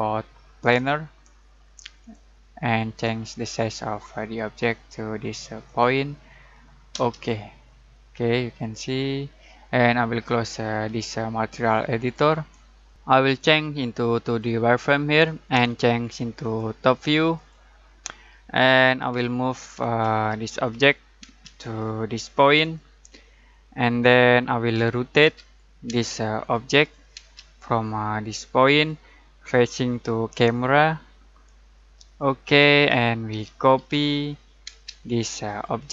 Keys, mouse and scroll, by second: 5.6 click, 6.9 space, 7.9-8.6 scroll down 1, 8.6-9.0 scroll up 1, 9.0-10.8 scroll down 1, 11.6-12.2 click, 14.2 alt+click, 19.1 alt+m, 19.8 alt+space, 20.6 alt+click, 21.3 alt+space, 21.5 alt+click, 24.7 alt+r, 25.2 alt+o, 25.9 alt+space, 26.4 alt+click, 27.2 alt+space, 28.7 alt+click, 32.1 alt+click, 33.3 alt+c, 33.8 alt+o, 34.7 alt+space, 35.5 alt+click.